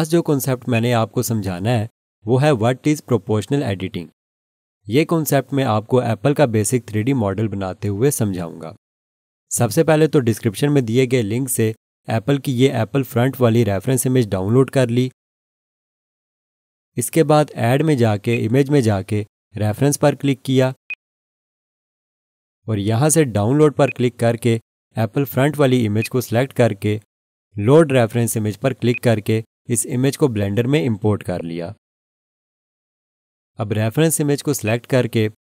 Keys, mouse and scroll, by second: 0.7 alt+shift+click, 18.3 click, 30.2 scroll down 1, 34.6 click.